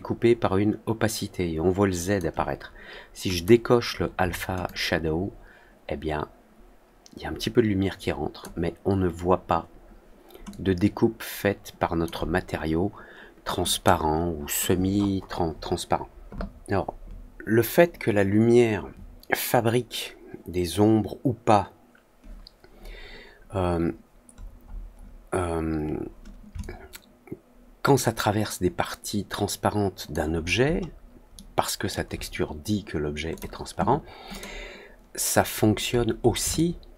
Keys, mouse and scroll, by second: 3.3 click, 4.6-8.3 alt+drag, 10.4-12.0 alt+drag, 13.6 click, 24.3 middle click, 24.6 middle click, 24.9 middle click, 26.5-30.0 alt+drag, 30.4 alt+middle click, 30.7 alt+middle click, 31.3-31.8 alt+middle drag, 33.3 click, 34.2 click, 35.5 middle click, 35.8 middle click, 36.2 middle click, 36.5-36.9 alt+middle drag.